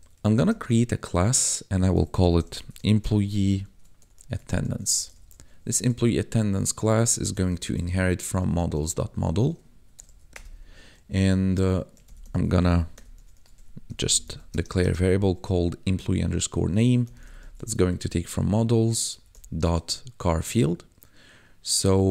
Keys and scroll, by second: 0.3 space, 1.9-5.5 typing, 7.1-8.7 typing, 9.6 Right, 10.0 shift+;, 10.2 Return, 11.9-14.8 typing, 17.0 m, 17.2 e, 17.5 s, 17.7 ., 19.1 c, 19.3 h, 20.5 Tab.